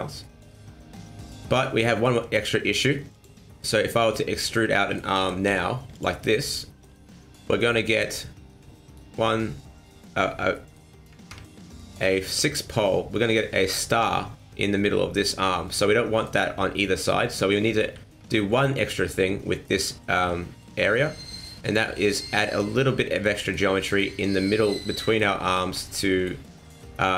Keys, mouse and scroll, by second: 0.2 middle click, 3.1 click, 3.6 click, 4.4 alt+right click, 4.8 middle click, 5.2 e, 6.2 middle click, 7.9 click, 8.3-8.9 scroll up 1, 8.9 right click, 10.3-10.7 scroll up 2, 10.5 middle click, 11.5 shift+middle click, 13.1 middle click, 15.8 middle click, 16.8 middle click, 17.2 ctrl+z, 17.5 ctrl+z, 17.8 ctrl+z, 18.3 scroll down 2, 18.5 middle click, 21.6 click, 22.4 middle click, 23.3 middle click, 23.7 middle click, 24.8 middle click, 25.4 middle click, 25.8 shift+middle click, 26.1 middle click, 26.6 middle click.